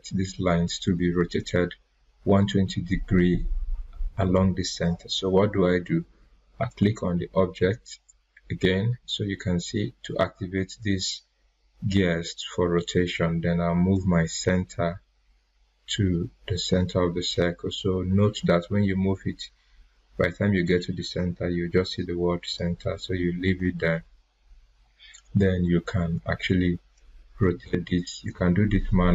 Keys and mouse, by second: 6.7 click, 13.9-23.9 drag, 27.3-29.1 ctrl+drag.